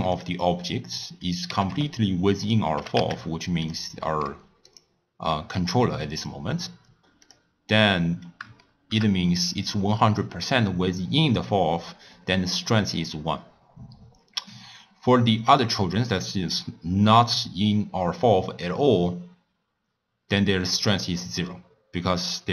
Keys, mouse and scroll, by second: 0.1 click, 0.9 click, 1.5 g, 2.8 g, 4.1 s, 5.5 s, 7.2 click, 7.6-8.5 scroll up 2, 8.5 shift+scroll up 1, 8.6-11.7 shift+middle drag, 15.5 click.